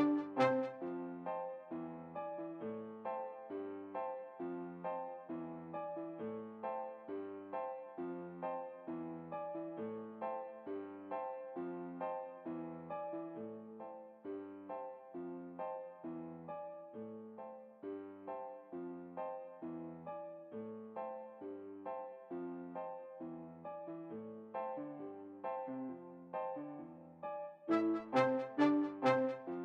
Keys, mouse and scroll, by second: 0.3 alt+a, 11.6 Escape, 12.9 Home, 13.6-15.7 middle drag, 18.8-20.3 right drag, 22.3 r, 29.0 alt+a.